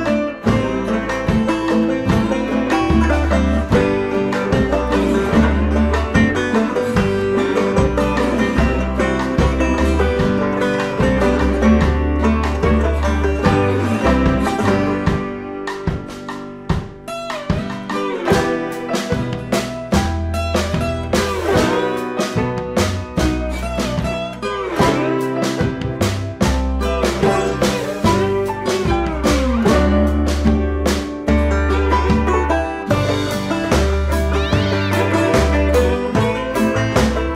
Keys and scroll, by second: 9.2 Return, 16.2 ctrl+=.